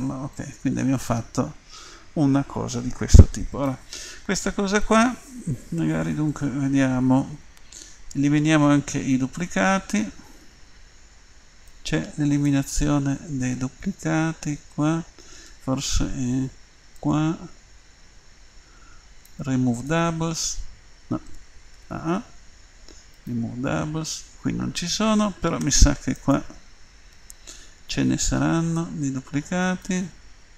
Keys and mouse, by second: 0.3 middle click, 1.1 click, 1.4 middle click, 2.0 middle click, 10.5 Tab, 11.7-13.6 drag, 15.5 Tab, 17.0-18.9 drag, 19.7-21.8 drag, 21.8 a, 21.9 a, 23.2-25.1 drag, 25.6 Tab, 26.2 right click, 27.2 Tab.